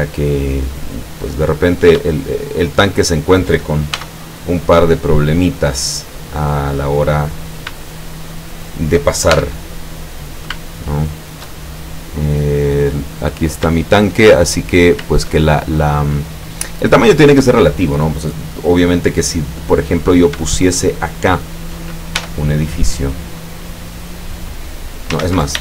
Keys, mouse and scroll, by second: 1.7 right click, 2.2 shift+right click, 2.7 shift+right click, 3.0 shift+right click, 4.0 shift+e, 6.0 click, 7.5 shift+right click, 7.9 shift+right click, 8.4 shift+right click, 9.4 shift+e, 10.5 shift+click, 11.7-12.0 shift+scroll down 3, 12.7-13.0 scroll up 2, 13.6 scroll down 1, 13.8 shift+middle click, 19.0 middle click, 19.5 scroll up 1, 20.2 shift+right click, 20.6 shift+right click, 21.0 shift+right click, 22.3 shift+e, 23.9 click, 24.3 click, 25.3 ctrl+z.